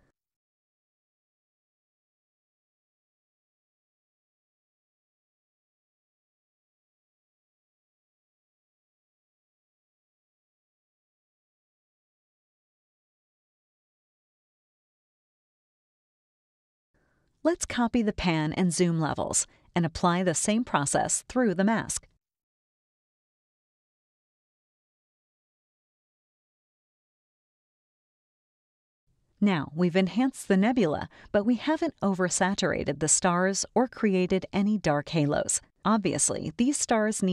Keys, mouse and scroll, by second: 0.8 click, 5.0 click, 7.4 scroll up 1, 7.5 scroll down 1, 7.9 scroll up 1, 7.9 scroll down 1, 9.9 click, 10.7 click, 12.2 scroll up 1, 13.0 scroll up 1, 13.6 space, 13.8-14.9 drag, 16.8-20.4 drag, 24.3 click, 29.8 click, 30.5 click, 31.3 click, 32.7 click, 33.5 click, 34.3 click, 35.3 click, 36.1 click.